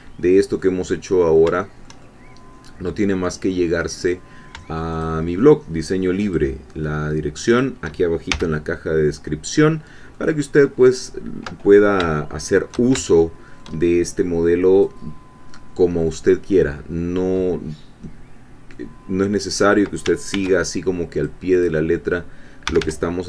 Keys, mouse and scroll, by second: 0.6 middle click, 1.6 shift+middle click, 2.4-4.0 middle drag, 4.0 click, 5.0-6.5 shift+drag, 7.6 shift+click, 8.3 shift+f, 10.2-11.9 drag, 12.6 shift+click, 13.0 shift+click, 18.0-20.0 middle drag, 20.3 ctrl+r, 21.2 click, 22.6 g.